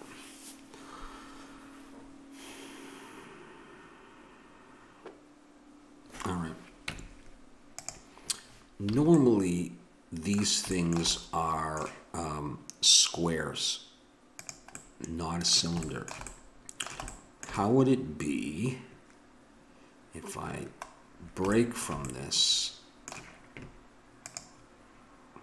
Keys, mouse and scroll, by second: 0.8 middle click, 6.9 Tab, 8.8 a, 9.1 click, 14.4 click, 14.8-16.4 middle drag.